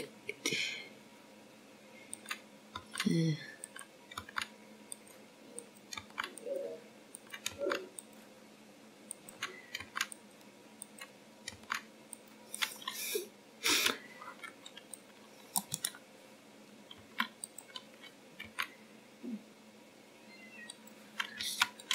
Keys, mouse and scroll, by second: 0.3 click, 0.8 g, 1.6 click, 2.2 g, 5.0 click, 5.6 g, 6.6 click, 7.1 g, 8.4 click, 8.8 g, 10.0 click, 10.5 g, 11.9 click, 12.6 g, 13.7 click, 14.4 g, 15.4 click, 16.6 c, 19.8 s, 21.3 g.